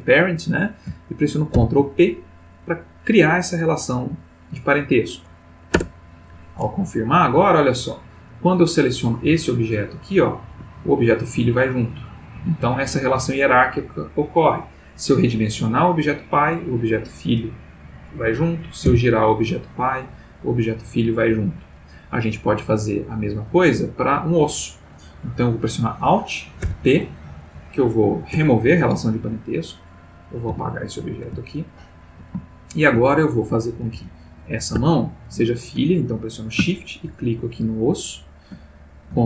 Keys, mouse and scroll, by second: 1.5 ctrl+p, 5.7 Return, 7.5 click, 9.2 g, 10.5 Escape, 11.3 g, 12.3 Escape, 12.9 s, 18.2 Escape, 18.9 r, 21.3 Escape, 23.3 click, 26.6 alt+p, 28.3 Return, 29.7 click, 30.5 x, 30.8 click, 31.4-32.3 ctrl+middle drag, 32.7 shift+middle click, 33.4 shift+click, 33.9 g, 34.8 Escape, 37.4 shift+click.